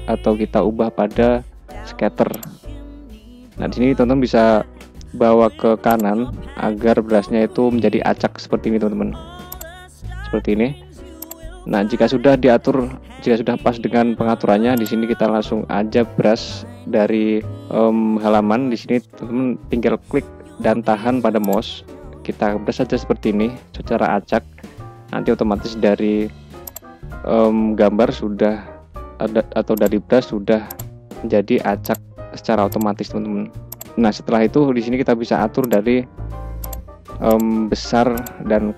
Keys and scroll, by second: 25.0 [, 28.9 ctrl+z, 34.2 [.